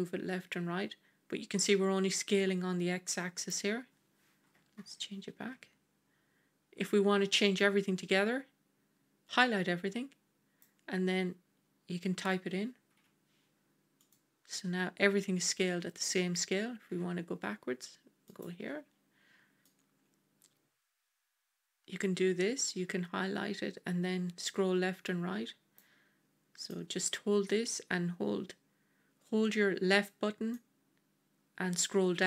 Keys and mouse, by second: 4.7 ctrl+z, 7.6-14.0 drag, 9.3 ctrl+z, 16.8 s, 19.5-25.6 drag, 26.5-29.9 drag, 30.5-32.2 drag.